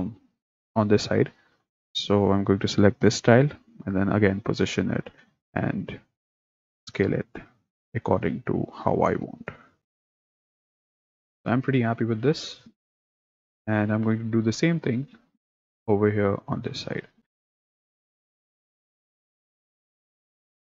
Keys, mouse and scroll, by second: 1.9 click, 3.6 g, 5.0 s, 8.0 s, 9.9 g, 10.2 s, 10.4 g, 11.0 s, 11.3 click, 14.0-16.0 middle drag, 16.0 click, 17.2 click, 17.3-20.1 typing.